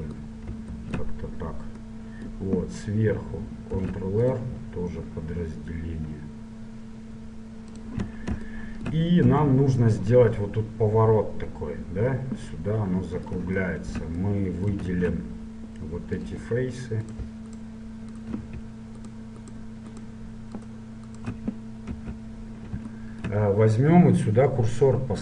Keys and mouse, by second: 2.1-7.1 middle drag, 4.0 ctrl+r, 9.4 KP_7, 15.1 ctrl+Tab, 17.2 right click, 22.1 KP_7.